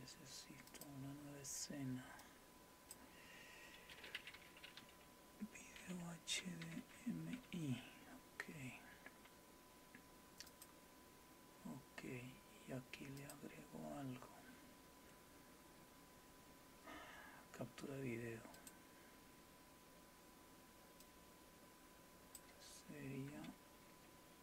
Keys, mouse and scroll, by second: 0.7 click, 2.2 click, 10.5 click, 13.2 click, 18.5 click, 21.0-22.4 drag.